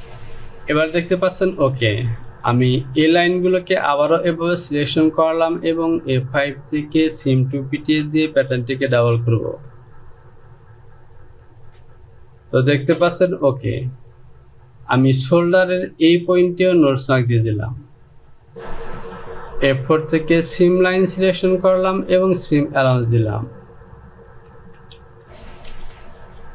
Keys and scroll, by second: 25.2 Return, 26.3 j.